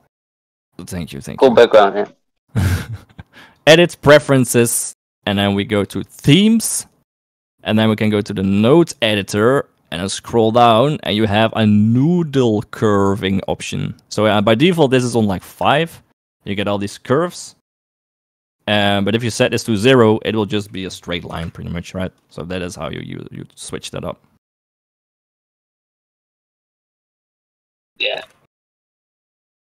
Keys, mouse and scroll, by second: 17.9 click, 29.3 click.